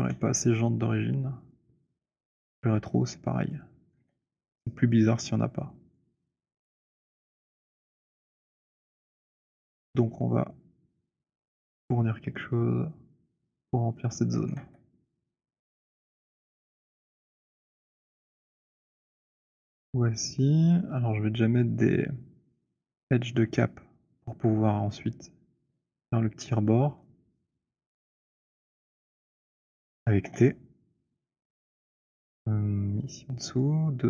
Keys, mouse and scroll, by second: 0.0 e, 3.3 click, 3.8 w, 5.6 click, 7.4 t, 14.3 click, 14.5 w, 15.5 middle click, 16.1-17.8 j, 18.0 click, 18.0 j, 19.0-21.8 typing, 21.8 click, 29.3 shift+right click, 30.2 t.